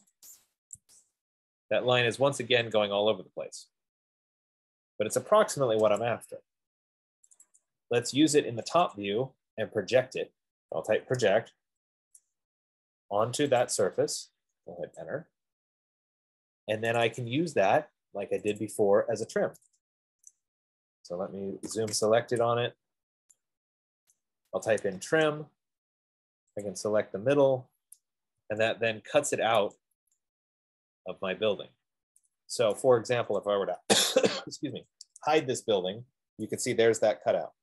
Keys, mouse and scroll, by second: 0.3 click, 0.6 click, 1.2 Escape, 3.0 click, 6.6 click, 7.6 click, 8.1 click, 9.2 click, 9.3 click, 9.8-10.1 scroll, 10.6 scroll, 10.7 middle click, 11.4-12.4 typing, 13.4 scroll, 14.0 click, 15.0 Return, 17.5 click, 17.8 click, 18.8 click, 19.1 click, 20.5 right click, 21.0-21.4 scroll, 22.0-22.4 typing, 22.6 middle click, 23.5 middle click, 24.4 right click, 24.6-25.4 typing, 26.9 click, 28.2-28.5 scroll, 28.7 Escape, 29.3 Return, 29.3 middle click, 29.9 Escape, 31.4 scroll up 3, 31.7 middle click, 33.0 right click, 33.7 click, 35.2-35.5 typing.